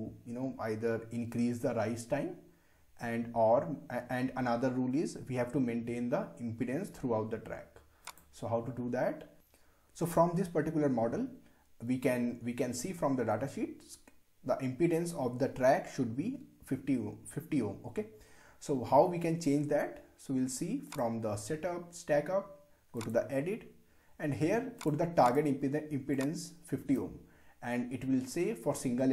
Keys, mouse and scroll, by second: 8.1 click, 20.9-29.1 drag.